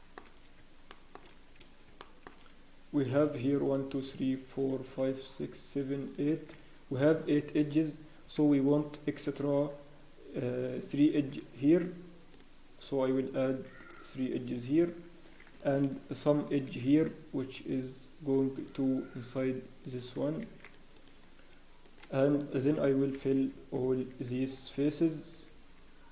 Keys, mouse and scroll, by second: 0.3 scroll, 0.9 shift+middle click, 0.9 scroll up 1, 1.4 scroll down 1, 2.0 shift+middle click, 2.3-2.7 scroll down 1, 3.1 click, 3.1 scroll down 1, 3.6-5.4 shift+middle click, 6.1 shift+middle click, 7.2 scroll down 1, 11.5 ctrl+r, 21.8 click, 22.3 shift+click, 23.1-24.8 f, 25.3 f.